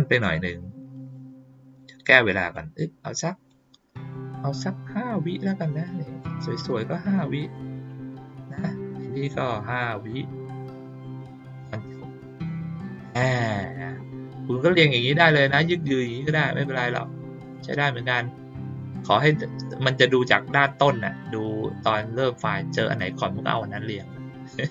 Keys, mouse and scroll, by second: 1.1 click, 2.5 click, 4.0 click, 6.1 click, 9.4 click, 11.2 click, 13.5 click, 16.1-17.0 drag.